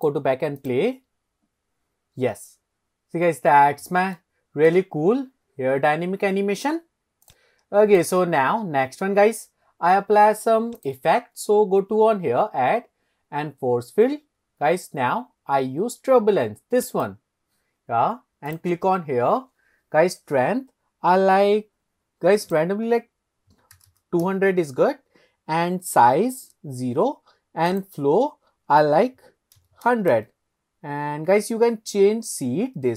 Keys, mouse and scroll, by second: 0.0 drag, 0.6 click, 4.3-4.9 shift+middle drag, 7.4 click, 8.0 click, 8.7 scroll up 1, 10.8-11.1 drag, 18.5 click, 22.5-24.6 drag, 23.9 KP_0, 27.7-30.5 drag, 29.8 KP_0.